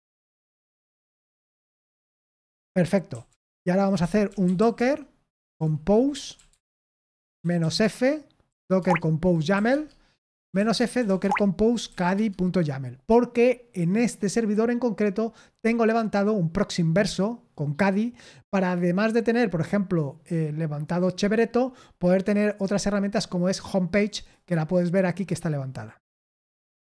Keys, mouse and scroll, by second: 0.0 Return, 2.8-12.3 typing, 9.6 Tab, 23.9 click.